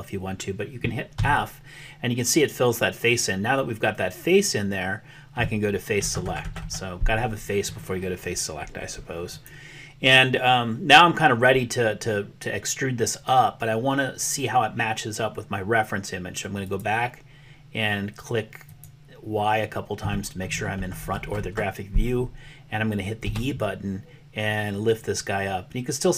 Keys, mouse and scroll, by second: 1.1 f, 9.4 click, 18.6 click, 23.2 e.